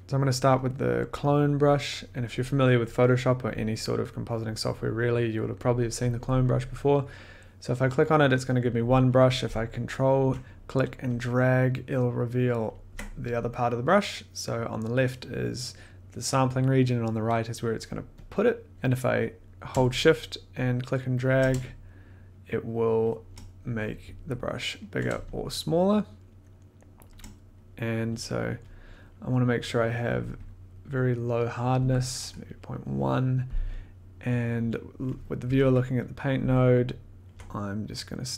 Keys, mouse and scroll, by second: 0.0 click, 1.6-6.7 drag, 10.3 click, 12.6 ctrl+click, 18.7 shift+click, 21.3 shift+click, 23.0 shift+click, 24.9 ctrl+click, 27.0 shift+click, 28.3 click, 28.3 scroll, 28.8 middle click, 28.9-29.3 scroll, 30.7 click, 31.4 click, 31.8 Down, 32.4 scroll down 1, 32.6 middle click, 35.3 click, 35.4 1, 37.6 scroll.